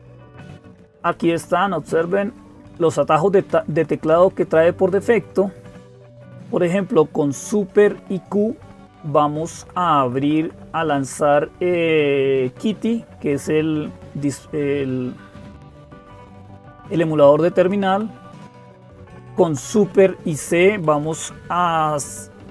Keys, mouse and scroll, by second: 0.0-22.5 typing, 1.5-2.5 Up, 3.3 Down, 3.5 Down, 3.7 Down, 3.9 Down, 4.1 Down, 4.5 Down, 4.7 Down, 4.9 Down, 5.0 Down, 5.7 Up, 7.7-8.9 Right, 9.4 Right, 9.6 Right, 9.8 Right, 10.0 Right, 10.4 Right, 10.6 Right, 17.7 Down, 18.8 Left, 19.0 Left, 19.2 Left, 19.4 Left, 19.6 Left, 20.0 Left, 20.8 Right, 21.5 Right.